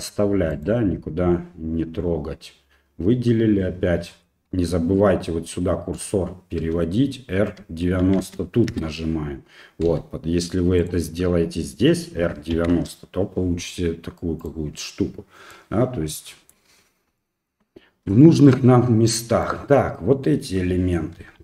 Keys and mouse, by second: 0.5 right click, 6.6 r, 9.9 g, 12.2 r, 15.5 middle click, 17.2 shift+middle click, 18.2 shift+middle click, 19.4 right click, 21.2 r.